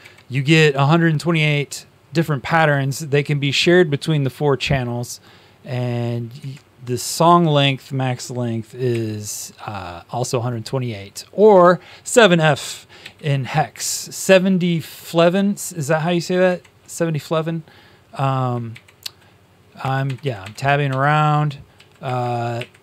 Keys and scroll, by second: 6.3 Tab, 8.8 End, 12.9 Home, 16.4 shift+Tab, 18.6 shift+Tab, 19.7 Tab, 20.0 Tab, 21.7 Down.